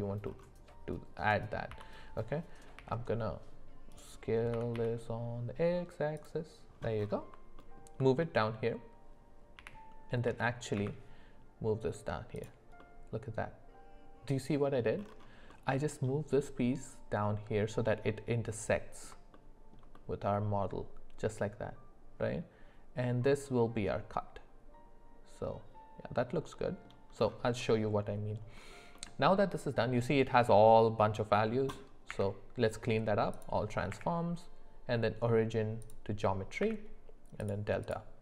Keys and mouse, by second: 1.7 s, 4.5 s, 7.5 alt+middle click, 9.5 g, 12.8-14.8 middle drag, 15.5 middle click, 18.1 middle click, 19.3 shift+middle click, 19.9-26.8 middle drag, 27.6 middle click, 28.9 middle click, 32.1 q, 33.9 q.